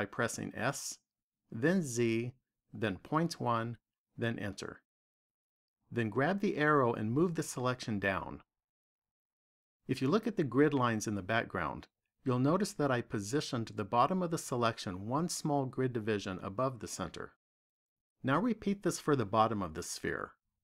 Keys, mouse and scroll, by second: 0.0 s, 7.3 click, 9.7 click.